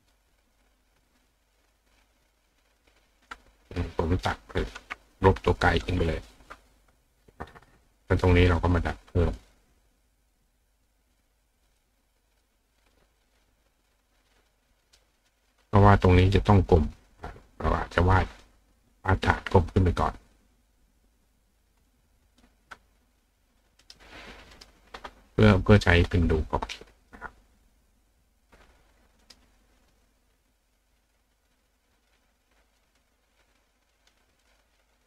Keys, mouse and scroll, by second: 0.5 click, 1.1 click, 2.8 click, 3.2 click, 3.7 click, 4.2 click, 5.1 click, 6.2 click, 7.9 click, 8.4 click, 9.3 click, 10.5 click, 11.8 click, 12.7 click, 13.2 click, 13.8 click, 14.4 click, 14.9 click, 17.9 click, 18.3 click, 19.1-22.4 drag, 23.5 click, 23.8 right click, 24.6 right click, 25.4 click, 27.0 click, 29.2 right click, 32.1 click, 34.0 click, 34.4 click.